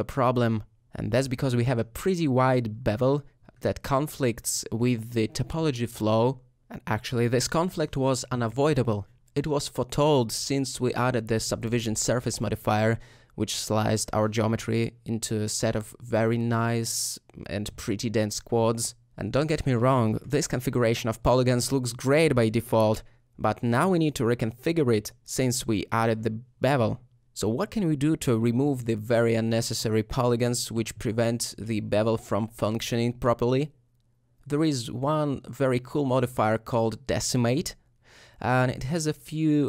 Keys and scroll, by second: 15.0 alt+shift+Tab, 15.5 3, 27.3 Tab, 33.2 ;.